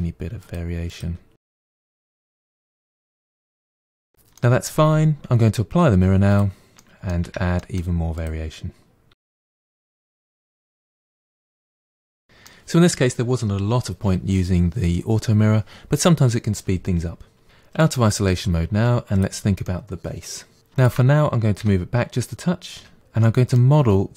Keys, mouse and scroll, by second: 0.0-2.3 typing, 0.2 middle click, 0.4 click, 0.7 middle click, 0.8 click, 1.1 click, 1.4 middle click, 1.7 click, 2.0 middle click, 2.3 click, 2.5 middle click, 2.7 click, 3.2 middle click, 3.6 scroll down 4, 3.7 middle click, 3.8 Tab, 3.9-4.9 middle drag, 4.9-6.3 scroll up 2, 6.3 click, 6.8 middle click, 7.2 Tab, 7.6 middle click, 8.2 click, 9.1-11.6 typing, 9.3 middle click, 9.7 click, 10.0 middle click, 10.1 click, 10.3 middle click, 10.8 middle click, 11.0 click, 11.3 middle click, 11.6 click, 11.8-13.4 middle drag, 17.8 KP_Divide, 19.2 click, 19.6 middle click, 20.8 shift+click, 21.6 g, 23.2-24.1 middle drag.